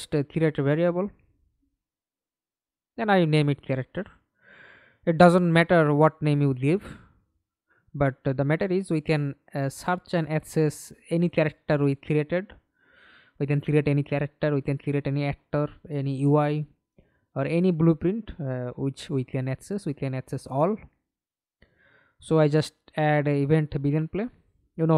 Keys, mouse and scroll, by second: 0.6-2.5 typing, 3.2 Return, 7.2-8.3 typing, 14.9 scroll up 2, 15.8 right click, 16.3-17.9 scroll up 5, 18.4 right click, 19.1-21.4 typing.